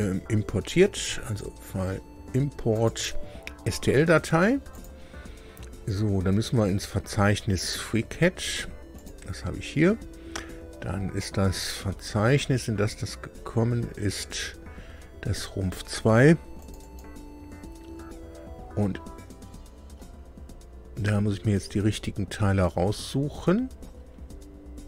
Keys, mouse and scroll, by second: 1.2 right click, 1.3 click, 2.7 click, 4.7 click, 8.9 click, 10.5-11.0 scroll down 2, 11.2-13.9 scroll down 16, 16.5 click, 21.5-21.9 scroll down 2.